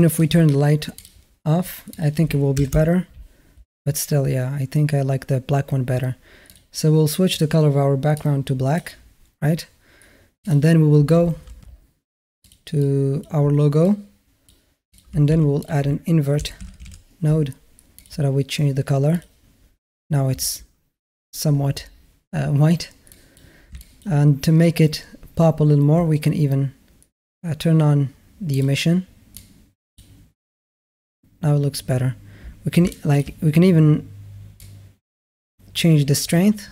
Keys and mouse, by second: 0.8 click, 1.9 click, 7.2 click, 10.2 click, 12.3 click, 12.6 click, 13.8 click, 14.7 click, 15.1 shift+a, 23.1 click, 23.7 shift+middle click, 23.7 shift+a, 28.4 drag, 32.7 shift+a, 32.8 drag, 34.4-36.1 drag.